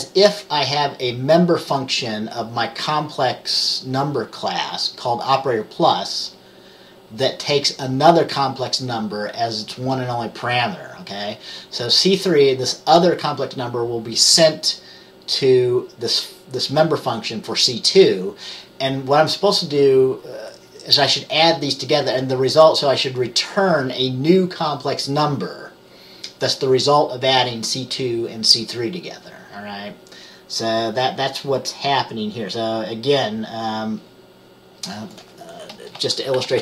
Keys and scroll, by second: 36.1 Return.